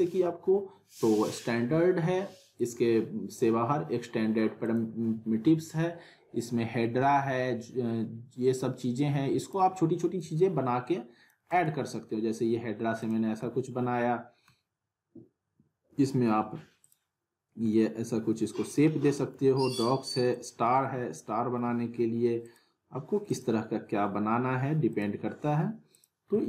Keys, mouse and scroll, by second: 2.6 click, 9.4-11.5 drag, 11.5 right click, 13.0 click, 13.4-14.7 alt+middle drag, 16.8 click, 17.7-19.0 middle click, 18.9-20.3 scroll up 2, 19.1 alt+middle click, 20.3 click, 21.1-21.8 alt+middle click, 22.4 click, 26.3-26.4 alt+middle click.